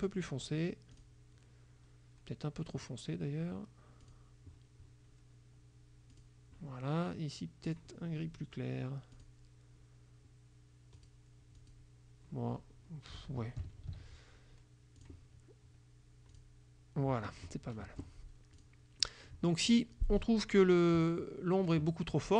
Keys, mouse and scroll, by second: 1.0 click, 4.1 click, 6.2 click, 7.7 click, 9.3 click, 11.1 click, 11.7 click, 13.9 ctrl+z, 15.1 click, 16.4 click, 17.9 F1, 18.7 click, 19.1 click, 19.5-20.6 middle drag, 20.6 click, 21.1-22.3 middle drag.